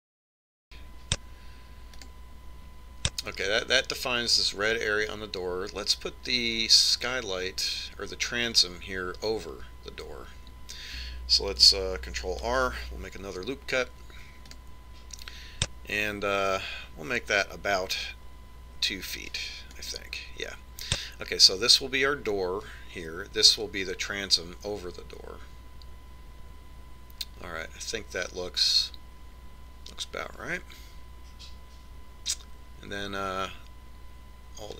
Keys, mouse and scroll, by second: 1.0 click, 13.4 ctrl+r.